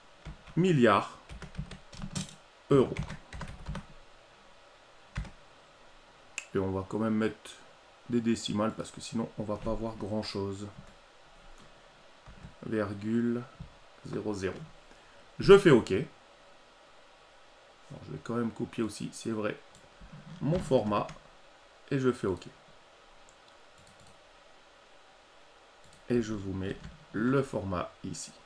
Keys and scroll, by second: 2.9 ctrl+alt+e, 20.5 ctrl+c, 26.6 ctrl+v.